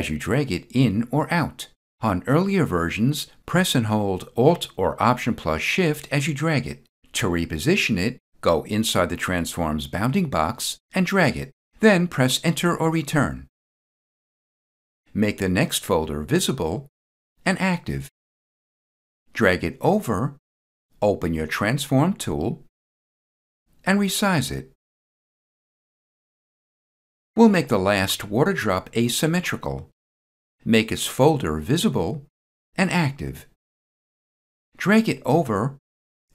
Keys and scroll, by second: 12.4 Return, 25.7 Return.